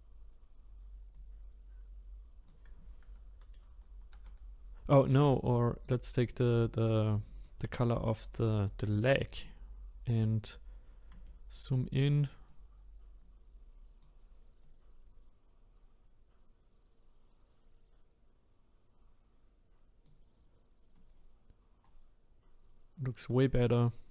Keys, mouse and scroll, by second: 1.1-4.1 drag, 4.1 ctrl+z, 5.2-6.3 scroll down 1, 6.3 click, 10.8-11.2 scroll up 1, 11.2-12.5 shift+middle drag, 12.5-17.6 drag, 21.1-21.8 scroll down 3, 21.8-23.0 scroll down 4, 23.0 click, 23.6-24.0 scroll up 5.